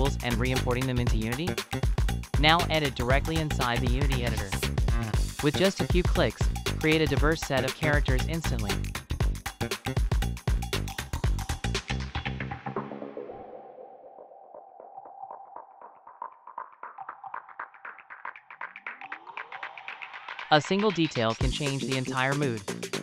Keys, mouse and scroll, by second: 16.3 middle click, 16.6 scroll up 2, 17.0 middle click, 17.0 middle click, 17.2 click.